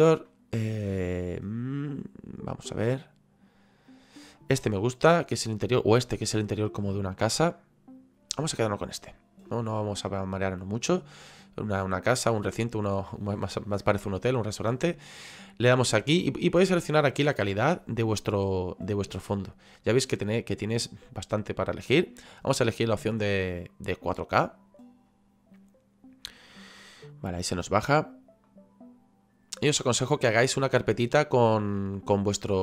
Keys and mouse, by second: 8.8 click, 23.7 click.